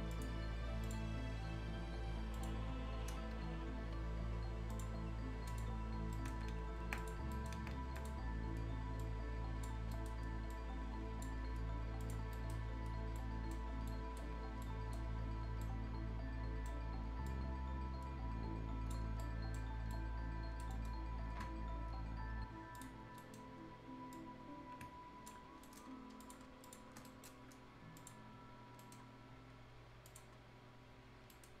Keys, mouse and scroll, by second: 0.1 click, 0.4-0.7 scroll up 1, 0.9 click, 3.2 scroll down 1, 3.4-3.9 scroll up 1, 4.7 click, 4.7 click, 5.3 scroll up 1, 5.5 click, 6.0 scroll down 1, 6.1 right click, 6.3 Escape, 6.4 scroll up 1, 6.5 Escape, 7.0 click, 7.2 scroll up 1, 7.3 right click, 7.6 Escape, 8.0 click, 8.2 scroll up 1, 9.0 click, 9.8 scroll down 1, 9.9 right click, 10.5-12.0 drag, 12.0 click, 12.3 right click, 12.6 scroll down 1, 13.2 right click, 13.6 scroll up 1, 13.9 right click, 15.1-15.5 scroll up 1, 15.5 scroll down 1, 15.6 right click, 16.8 scroll up 1, 17.3-19.1 drag, 19.1 scroll down 1, 19.2 right click, 19.7 scroll up 1, 19.9 right click, 20.7 middle click, 22.8 click, 23.0 scroll down 1, 23.2 right click, 24.1 click, 25.4 ctrl+scroll down 1, 25.7 right click, 25.9-26.2 scroll up 1, 26.2 click, 26.9 scroll down 1, 27.1 shift+right click, 28.0 click, 28.0 click, 28.6 scroll up 1, 28.8 right click, 29.0 scroll down 1, 30.1 click, 30.4 scroll down 1, 31.3 right click.